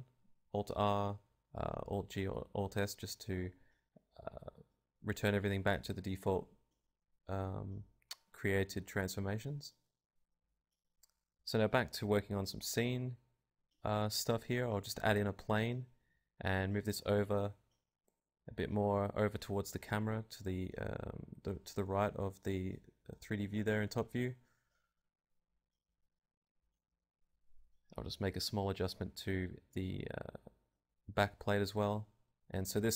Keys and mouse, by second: 0.0-1.7 drag, 1.3 a, 2.2-4.2 drag, 4.2-6.5 middle drag, 6.5-8.0 right drag, 6.8 ctrl+KP_0, 9.5-13.8 typing, 10.9 click, 11.3 click, 14.9 click, 15.5-17.5 typing, 16.3 click, 16.8 click, 20.0 alt+z, 20.0 click, 20.0 g, 20.2 right click, 20.6 g, 20.9 click, 22.0 click, 22.5 KP_1, 23.1 KP_3, 25.2 g, 27.7 click, 28.0 KP_0, 30.8 click, 31.2 middle click, 31.6-32.8 right drag, 32.0 Tab, 32.8 a, 32.8 u.